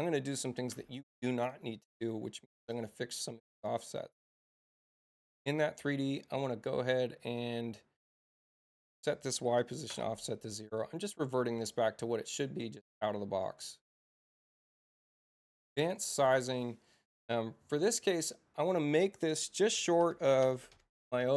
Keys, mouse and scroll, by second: 1.7 click, 4.3 click, 9.0 click, 11.0 click, 12.2 click, 13.4 click, 18.1 click.